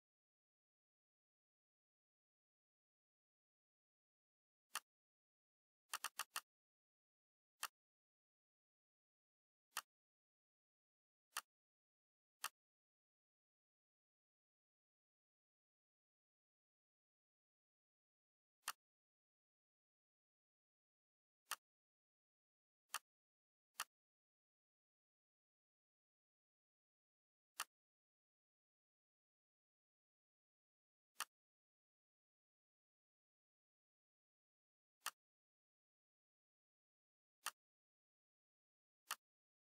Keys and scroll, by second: 2.9 F9.